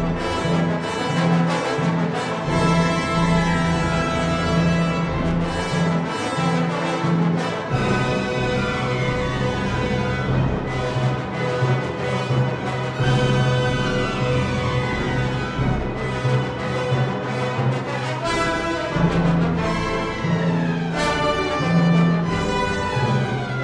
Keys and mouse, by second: 3.4 Tab, 9.2 ctrl+r, 12.0 Tab, 19.2 Tab.